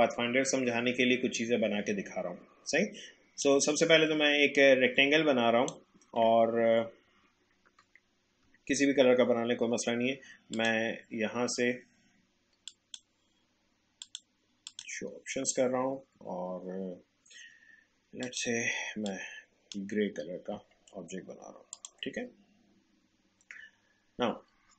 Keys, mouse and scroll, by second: 3.4-8.3 drag, 10.5 click, 18.2-21.7 drag.